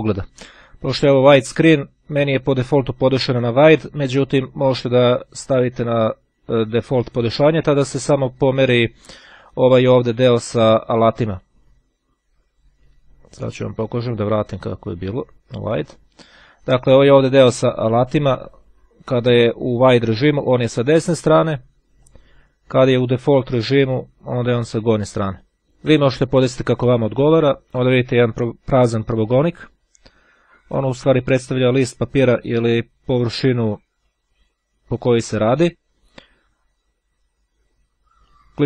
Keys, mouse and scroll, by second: 5.5 click, 14.5 click, 15.7 click, 21.9 click, 23.2 click, 27.7 click, 37.5-38.6 drag.